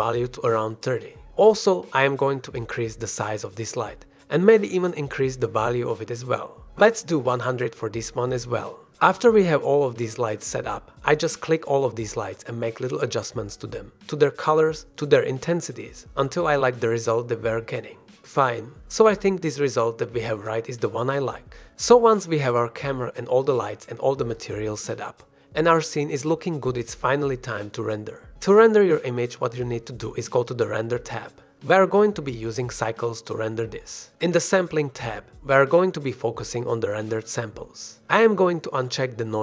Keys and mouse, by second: 0.3 s, 1.6 click, 2.0 r, 2.3 x, 2.8 y, 3.7 click, 3.9 middle click, 5.0-6.2 drag, 6.8 click, 7.2 middle click, 7.6 KP_0, 9.3 click, 13.5 click, 13.7 middle click, 15.1 KP_5, 15.2 KP_0, 22.8 shift+click, 23.5 shift+click, 29.1 click, 32.8-33.9 drag.